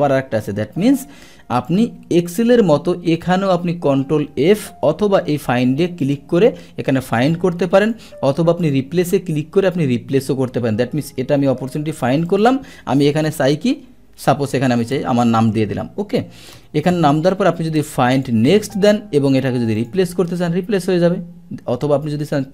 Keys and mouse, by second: 1.7 click, 6.0 click, 7.8 click, 8.6 click, 12.3 click, 18.1 click, 19.8 click.